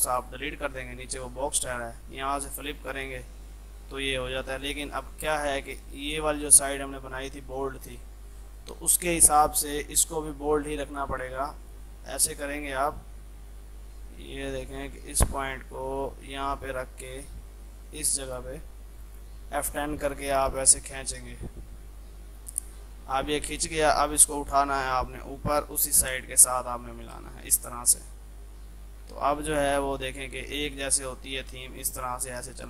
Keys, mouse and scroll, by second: 5.0 F2, 5.2-7.9 drag, 7.9 ctrl+z, 8.3 F3, 8.6-27.2 drag, 27.2 space, 27.6 ctrl+click, 29.4 F3, 29.9-31.1 drag, 31.1 shift+F2.